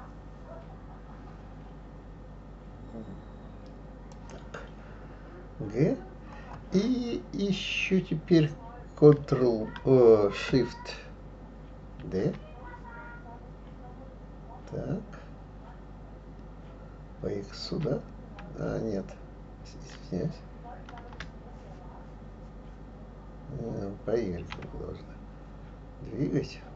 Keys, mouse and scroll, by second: 12.0 shift+d.